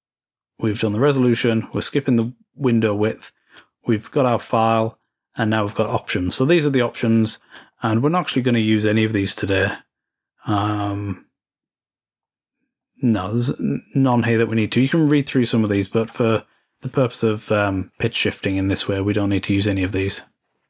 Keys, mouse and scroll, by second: 0.7 click, 1.5 click, 2.8 click, 5.1 click, 5.9-6.7 scroll down 2, 6.1-7.6 drag, 7.6-10.3 scroll down 5, 10.3-11.2 scroll down 1, 12.1-13.5 scroll up 3, 13.5-14.3 scroll up 1, 14.3-15.1 scroll down 2, 15.4-16.7 drag, 15.8-18.3 scroll down 2.